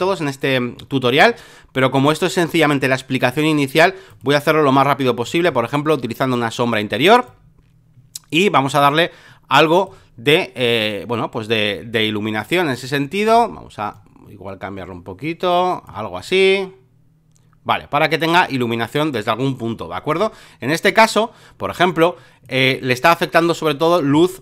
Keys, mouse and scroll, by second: 0.0-3.2 drag, 4.1-24.4 drag.